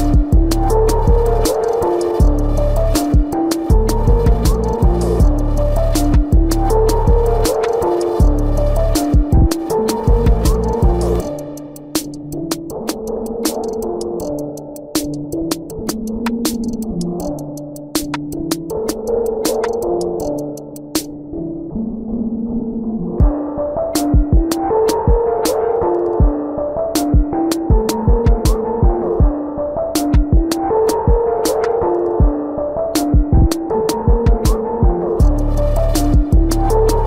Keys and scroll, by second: 2.7 space, 3.7 space, 7.4 space, 9.1 space, 11.0 space, 13.8 space, 14.4 space, 18.0 space, 18.9 space, 21.5 space, 22.2 ctrl+alt+z, 23.4 ctrl+=, 23.7 space, 24.0 ctrl+-, 24.9-26.3 typing, 27.6 space, 29.5 space, 32.0 space, 33.0 space.